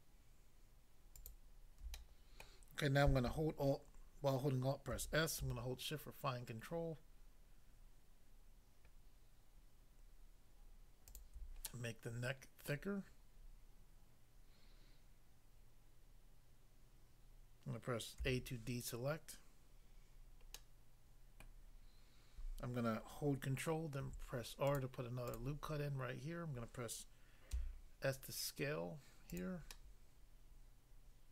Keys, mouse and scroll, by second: 1.2 alt+click, 1.9 middle click, 2.5 middle click, 4.9 alt+s, 11.2 shift+click, 11.7 middle click, 12.7 middle click, 18.2 a, 20.6 middle click, 21.4 middle click, 24.0 ctrl+r, 24.7 click, 24.8 click, 25.2 click, 25.4 click, 27.6 s, 29.3 click, 29.8 middle click.